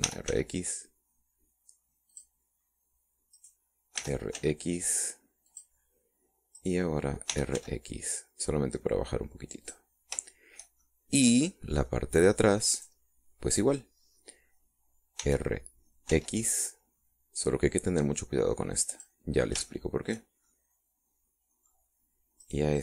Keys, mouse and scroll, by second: 0.2 right click, 1.0 r, 1.3 x, 3.1 click, 4.4 right click, 5.0 r, 5.3 x, 6.5 click, 7.6 right click, 8.3 r, 8.5 x, 10.6 click, 11.3 shift+middle click, 11.8-13.0 shift+middle drag, 13.7 right click, 16.2 r, 17.1 x, 19.9 click, 20.7 shift+middle click, 21.5-22.8 shift+middle drag.